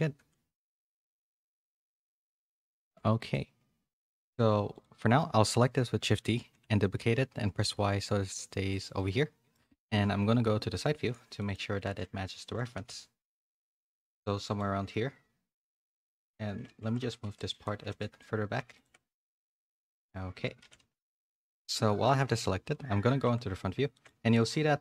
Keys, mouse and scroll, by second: 0.6 z, 1.0 shift+middle click, 1.6 s, 2.8 z, 3.3 middle click, 4.7 click, 5.0 middle click, 6.3 shift+d, 8.9 middle click, 10.2 KP_3, 11.4 middle click, 11.7 z, 12.3 z, 12.6 g, 14.3 shift+middle click, 16.5-17.7 typing, 18.8 Tab, 19.1 z, 19.3 z, 20.6 a, 20.8 a, 21.4 click, 22.0 Tab, 22.2 KP_1, 23.2 Tab, 23.9 shift+middle click, 24.7 z.